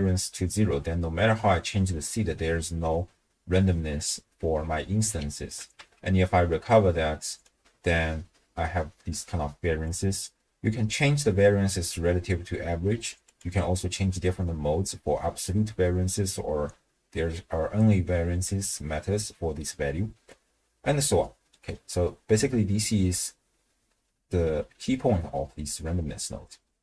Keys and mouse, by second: 1.1-4.1 drag, 5.8 w, 7.4-9.9 drag, 13.2-19.6 drag, 21.0 middle click.